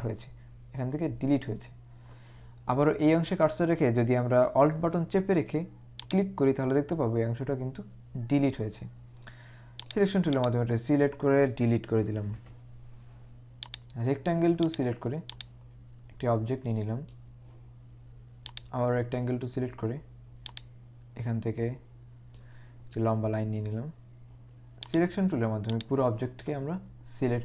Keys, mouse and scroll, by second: 9.9 click, 12.4 Delete, 13.8 right click, 14.6 click, 18.7 click, 20.5 click, 22.8 scroll up 1, 25.0 click.